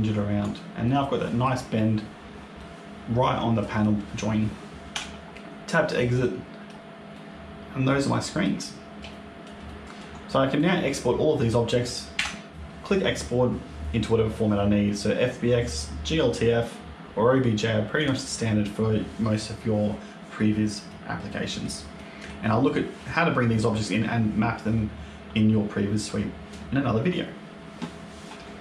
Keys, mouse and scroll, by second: 0.7 middle click, 2.5 middle click, 4.8 Tab, 5.2-6.0 scroll down 4, 6.0 middle click, 6.7-7.6 scroll down 2, 7.0 middle click, 8.6-9.0 scroll up 2, 9.0 shift+middle click, 9.5 middle click, 10.0-10.4 scroll up 1, 10.4 middle click, 11.0 scroll down 1, 12.0 a, 12.5 click, 17.9 click, 20.8 middle click, 21.8 middle click.